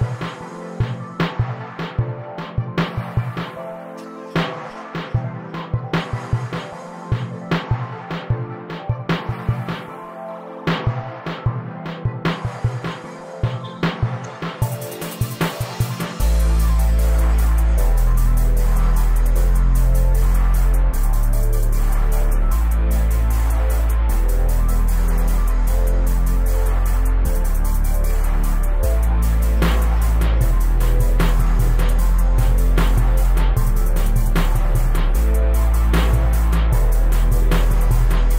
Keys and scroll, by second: 0.5 q, 5.5 Escape, 12.5 s, 14.3 s, 23.5 1, 23.8 Return, 33.3 space, 35.9 m.